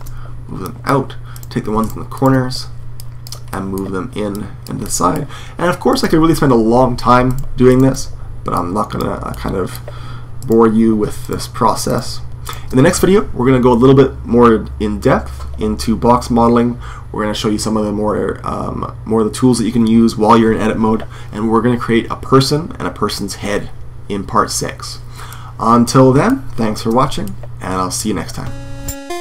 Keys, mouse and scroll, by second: 2.2 right click, 3.2-6.0 drag, 3.4-6.4 middle drag, 3.4 right click, 5.8 right click, 9.0 middle click, 9.2 click, 9.3 middle click, 9.4 click, 9.5 middle click, 10.1 click, 10.4-13.8 drag, 14.0-24.9 drag, 24.9-28.4 middle drag.